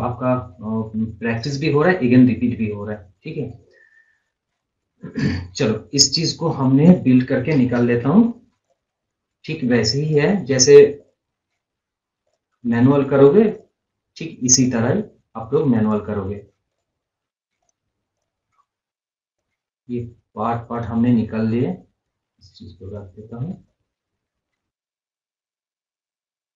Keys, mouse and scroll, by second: 2.9 scroll up 1, 3.1 scroll down 1, 4.4 scroll up 1, 5.4-5.8 scroll down 1, 6.5 scroll up 1, 6.8-8.0 scroll, 8.0 b, 8.6 click, 17.6 right click, 18.2 click, 18.5 scroll up 1, 18.7 scroll, 18.7 scroll down 1, 19.4-26.5 drag.